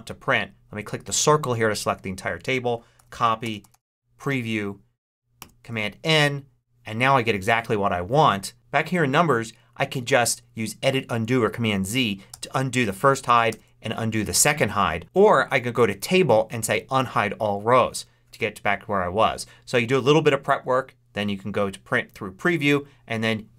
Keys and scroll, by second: 2.9 super+c, 3.6 super+p, 3.6 r, 5.0 super+Return, 5.3 super+n, 12.2 super+z, 13.4 super+z.